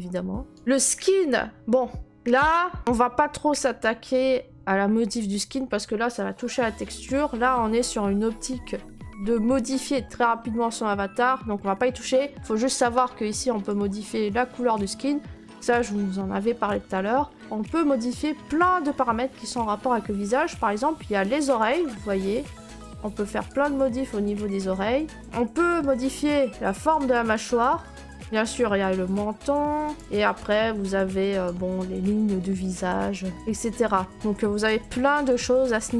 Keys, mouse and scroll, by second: 0.0-0.7 scroll, 0.6 right click, 2.9-3.9 drag, 12.7-15.5 drag, 21.5 click, 23.6 middle click, 23.7 middle click, 25.1 click, 25.1 middle click, 26.8 click, 28.1 middle click, 28.3 middle click, 29.9 click, 30.0 middle click, 31.4 click.